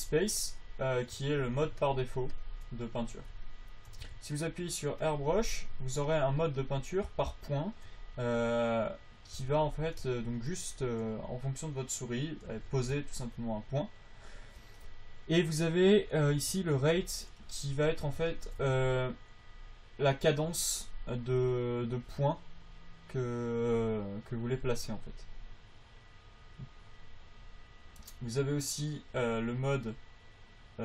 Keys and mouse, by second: 0.2 a, 1.6 click, 1.9-3.0 middle drag, 3.0-7.0 drag, 5.4 a, 8.6-10.5 drag, 11.8-12.8 drag, 12.8 f, 18.1 f, 18.7 click, 19.0 f, 19.8-20.8 drag, 20.8 f, 25.0 f.